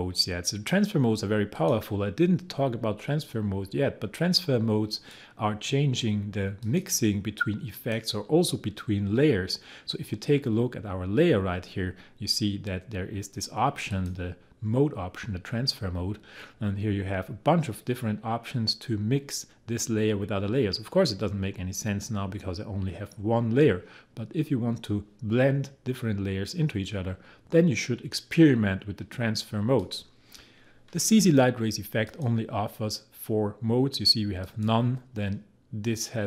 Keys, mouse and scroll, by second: 4.9 click, 30.4 click, 32.1 click, 34.4 click.